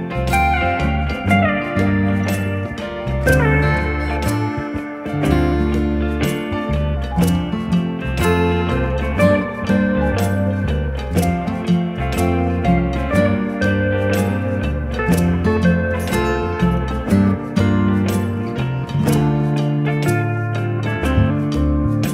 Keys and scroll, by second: 2.5 Escape, 3.0 d, 5.5 2, 5.6 0, 5.8 Return, 10.2 Escape, 16.0 -, 16.4 1, 16.5 0.